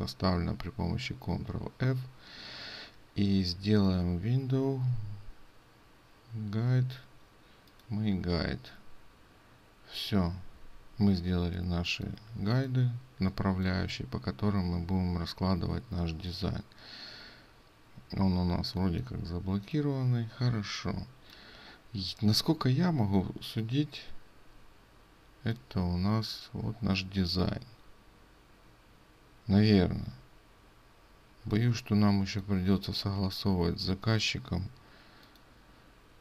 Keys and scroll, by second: 12.4 ctrl+space.